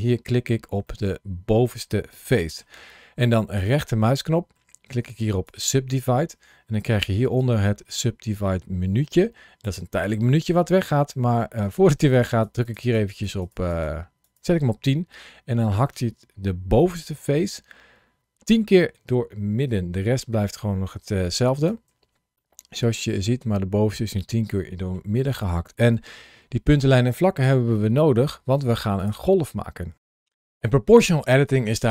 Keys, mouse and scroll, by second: 0.7 middle click, 3.4 right click, 7.1 ctrl+shift+a, 11.5 click, 11.9 click, 21.4 click, 21.7 1, 22.2 middle click, 28.8 click.